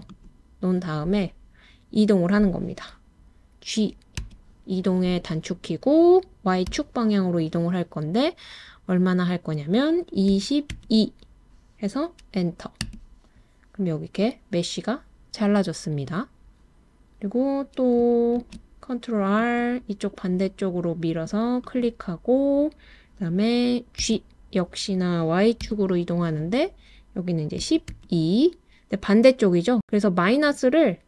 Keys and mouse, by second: 0.1 click, 4.2 g, 6.7 y, 10.3 2, 10.7 2, 12.8 Return, 18.4 super+r, 21.6 click, 24.0 g, 25.6 y, 27.9 2.